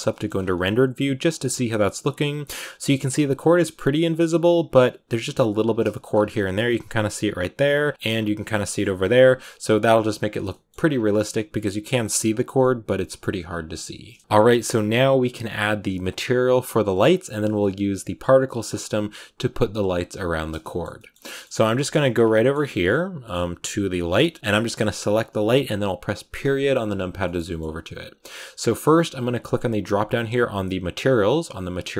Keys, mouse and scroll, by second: 0.2-2.1 scroll up 4, 2.3-3.5 drag, 3.5-5.0 shift+middle drag, 5.0 ctrl+b, 5.7 shift+middle click, 5.9-6.3 scroll up 5, 7.9 ctrl+b, 8.0-8.3 scroll down 4, 8.3 shift+middle click, 8.9 ctrl+b, 10.4 shift+middle click, 10.8-11.9 scroll up 5, 13.6 scroll down 9, 14.2 ctrl+s, 20.2 z, 20.5 shift+middle click, 20.7 scroll down 1, 20.8 shift+middle click, 21.5 scroll down 1, 21.6-23.8 shift+middle drag, 23.8-26.2 right drag, 26.2 KP_Decimal, 27.1 scroll up 1, 27.1-29.5 shift+middle drag, 29.5-31.4 drag.